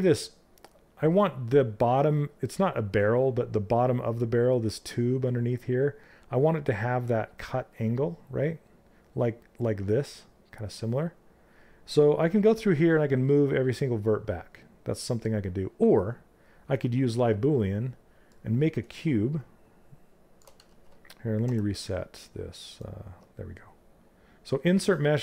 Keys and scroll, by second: 20.1 ctrl+z, 21.0 w.